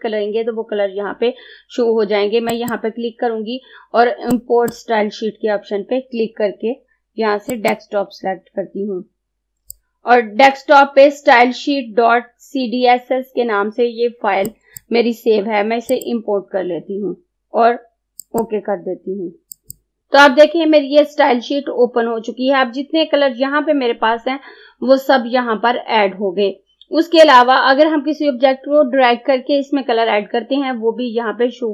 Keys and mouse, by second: 7.6-12.3 drag, 14.5 click, 18.3 click.